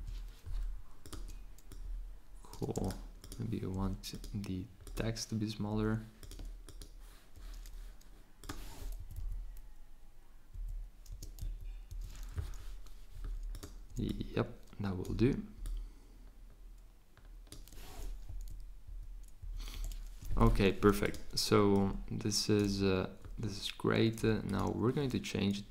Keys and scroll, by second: 8.5-9.3 typing, 10.6-11.4 typing.